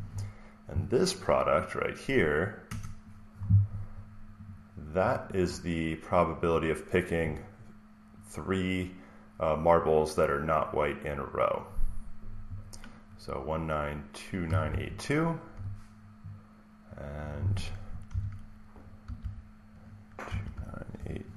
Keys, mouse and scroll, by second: 2.5 Return, 4.3 click, 14.4 click, 14.6 alt+Tab, 16.4 click, 17.2-19.3 drag, 18.7-21.3 typing.